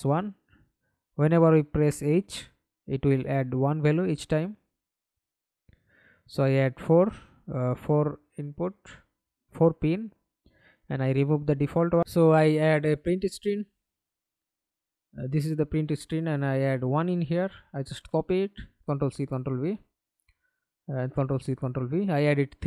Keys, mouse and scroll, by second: 0.2 double click, 4.7 right click, 6.1 right click, 7.3 right click, 10.8-12.2 typing, 12.9 Return, 15.9 1, 16.2 Return, 16.9 right click, 18.5 ctrl+c, 19.2 ctrl+v, 21.1 ctrl+v.